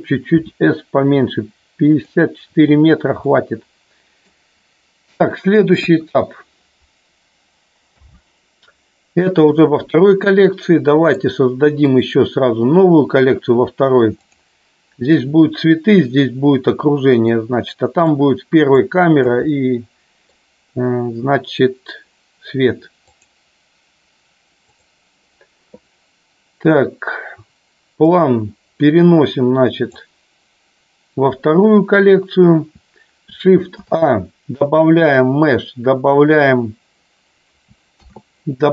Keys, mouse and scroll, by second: 0.4 s, 1.9 click, 3.2-4.2 middle drag, 5.7 KP_1, 7.9 n, 11.0 right click, 14.2 click, 17.1 middle click, 17.7 middle click, 18.7 click, 19.3 middle click, 28.1-29.9 drag, 33.7 shift+a, 37.8 shift+a.